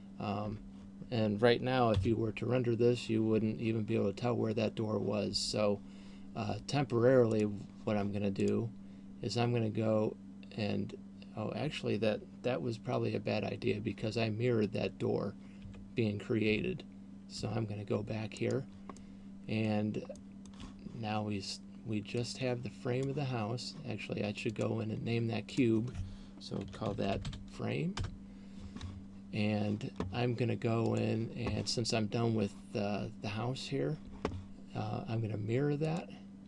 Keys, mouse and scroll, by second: 0.7 Tab, 5.4 Escape, 7.4 right click, 8.7 right click, 15.9 ctrl+z, 16.7 ctrl+z, 17.7 ctrl+z, 18.7 right click, 19.2 middle click, 20.2 middle click, 22.2 click, 24.9 click, 25.9 click, 31.2 click, 35.9 click.